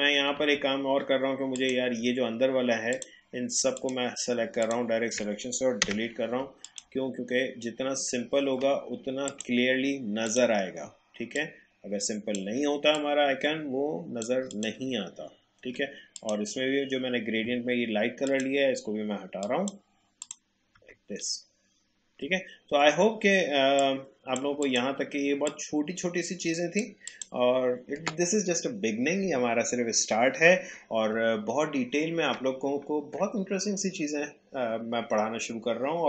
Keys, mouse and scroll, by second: 0.4 a, 1.6 click, 2.9 shift+click, 5.8 Delete, 6.6 click, 7.1-8.5 alt+scroll down 1, 9.2 click, 11.3-14.5 shift+drag, 15.3-15.7 alt+scroll up 1, 16.1 click, 20.8 Tab, 21.8-22.2 alt+scroll down 1, 23.8 click.